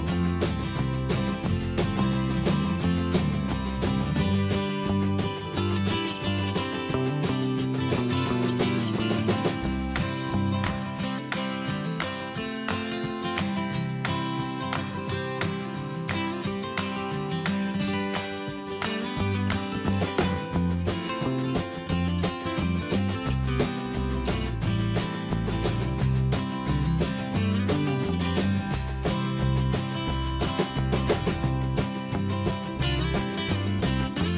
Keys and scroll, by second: 2.6 alt+Down, 3.7 ctrl+y, 4.5 ctrl+shift+], 4.7 ctrl+y, 6.4 ctrl+shift+], 11.2 alt+Right, 14.2 alt+Tab, 15.9 ctrl+z, 16.2 alt+Tab, 17.6 ctrl+c, 18.8 ctrl+v, 19.2 Escape, 19.9 alt+Up.